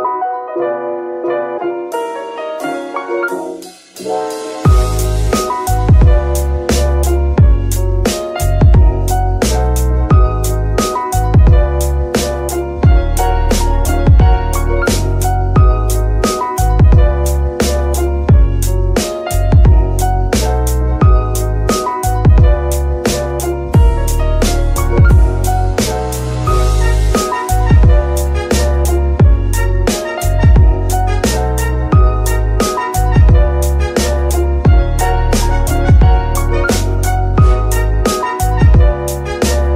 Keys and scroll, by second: 13.7 Tab, 14.4 shift+s, 15.7 shift+Tab, 15.8 shift+s, 16.6 KP_1, 18.5 g, 18.8 x, 21.0 KP_3, 22.3 g, 22.4 y, 24.8 g, 24.9 y, 28.4 g, 28.7 x.